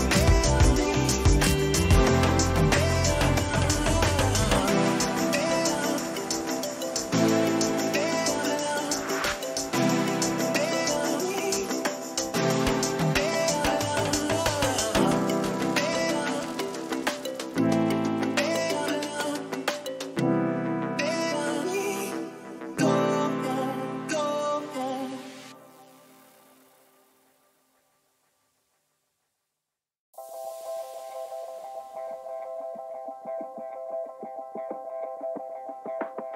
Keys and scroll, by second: 3.0 ctrl+-, 4.0 ctrl++, 11.3 ctrl+a, 12.2 ctrl+c, 14.4 ctrl+v, 15.0 ctrl+-, 15.9 ctrl+t.